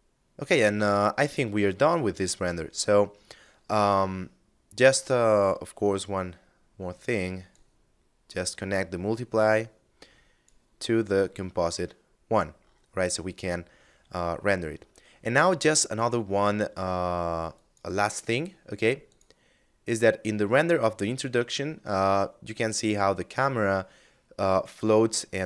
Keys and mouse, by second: 0.3 middle click, 3.6 middle click, 5.0 click, 7.5 click, 10.3 click, 11.3 middle click, 15.0 shift+space, 16.7 click.